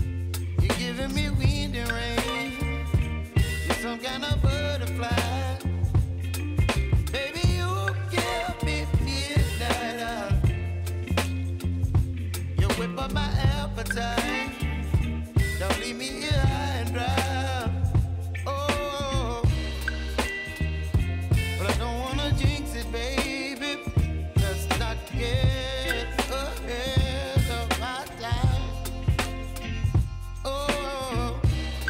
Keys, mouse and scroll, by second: 1.8-4.2 drag, 4.2 space, 6.1 click, 7.4 Return, 8.3 click, 8.7 space, 12.5 space, 13.7 click, 15.7 =, 19.9 typing, 20.7 click, 22.6 [, 23.3 click, 24.8 [, 25.8 click, 27.1 [, 27.8 click, 29.1 [, 29.8 click, 30.7 [, 30.9 scroll up 1.